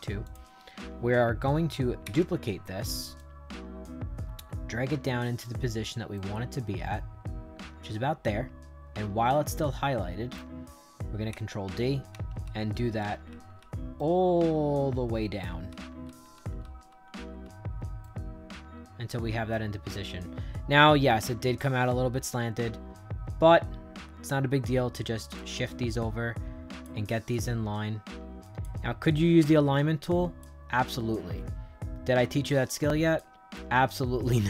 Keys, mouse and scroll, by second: 0.1 click, 1.9 ctrl+d, 3.1-5.8 drag, 6.1-10.3 right drag, 11.2 ctrl+d, 12.0 ctrl+d, 12.3 ctrl+d, 12.6 ctrl+d, 12.9 ctrl+d, 13.2 ctrl+d, 13.5 ctrl+d, 13.9-15.3 right drag, 15.6 ctrl+d, 16.0 ctrl+d, 16.2 ctrl+d, 16.5 ctrl+d, 16.8 ctrl+d, 17.0 ctrl+d, 17.3 ctrl+d, 17.9-20.6 right drag, 22.2-24.8 drag, 25.3-26.7 drag, 27.2-28.5 drag, 29.0-30.3 drag, 30.8-33.1 drag, 33.5-34.4 drag.